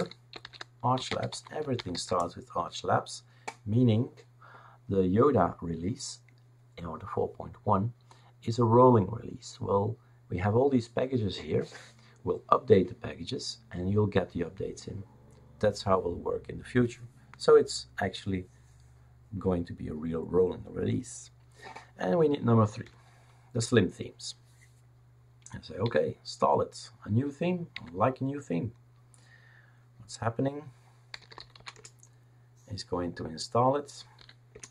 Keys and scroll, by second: 0.0-2.4 typing, 22.8 3, 23.5 Return, 25.8 y, 27.7 n, 30.9-32.0 typing, 34.2 typing, 34.5 Return.